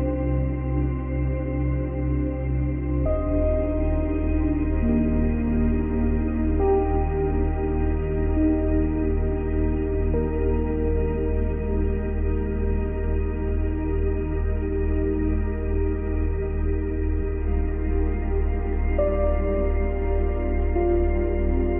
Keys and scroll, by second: 6.8 space, 10.9 space.